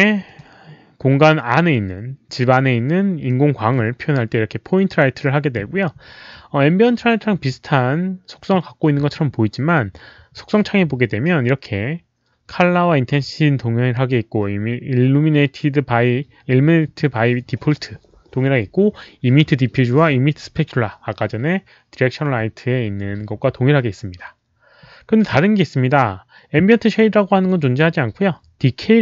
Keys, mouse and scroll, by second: 0.2 click, 3.2 middle click, 4.8 click.